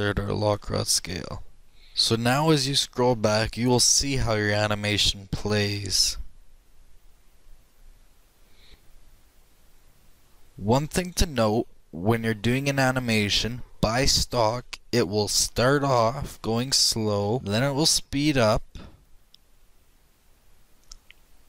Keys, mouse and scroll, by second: 2.5-21.4 drag.